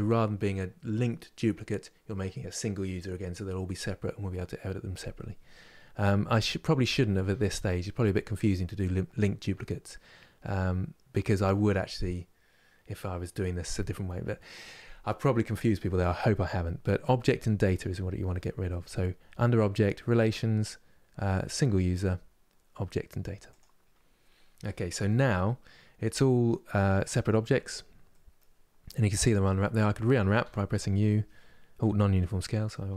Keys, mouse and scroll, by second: 24.7-27.2 middle drag, 27.2 Tab, 27.8-30.1 middle drag, 30.1 u, 31.8 middle click, 32.6 Tab.